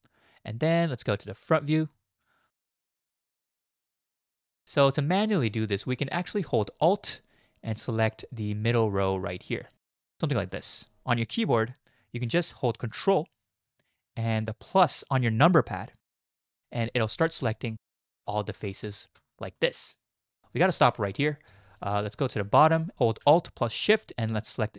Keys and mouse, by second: 2.9 z, 5.5 shift+drag, 10.6 alt+click, 21.6 shift+middle click.